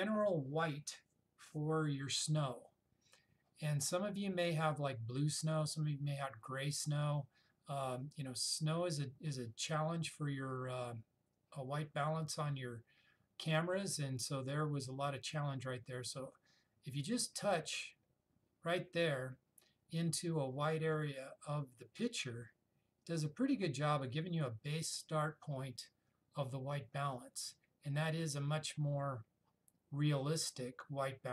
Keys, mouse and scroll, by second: 17.7 click, 21.0 click.